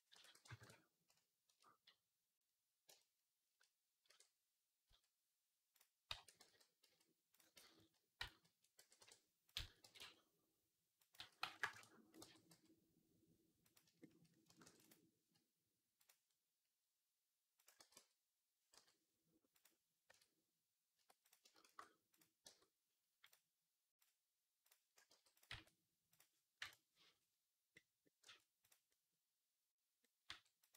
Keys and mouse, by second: 0.0 s, 3.0-12.1 shift+middle drag, 3.9 e, 6.0 a, 6.3 g, 7.4 ctrl+z, 7.6 ctrl+z, 8.4 ctrl+z, 8.6 e, 9.4 a, 9.7 g, 11.0 s, 12.1 g, 14.5 ctrl+r, 15.9-17.5 drag, 17.5-21.1 middle drag, 17.6 g, 20.0 Tab, 20.8 Tab, 21.1 click, 21.2-23.2 shift+middle drag, 21.5 shift+s, 22.3 Tab, 23.2-25.2 drag, 24.9 g, 25.2-30.1 middle drag, 25.3 r, 26.4 KP_1, 26.5 click, 28.1 r, 30.1 r, 30.6 g.